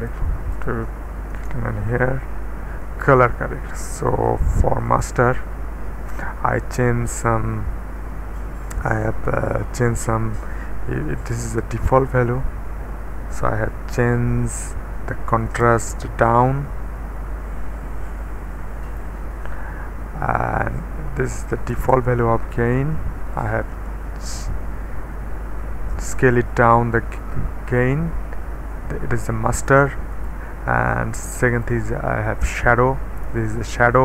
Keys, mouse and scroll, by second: 0.0 click, 0.5 click, 1.4 Return, 4.9 click, 7.2-8.0 scroll down 1, 11.2 KP_1, 11.7 Return, 14.1-16.0 typing, 17.1-19.8 middle drag, 21.4 KP_1, 21.7 KP_Enter, 23.7 ., 24.1 KP_8, 25.6-26.4 typing, 30.1 click, 31.5 click.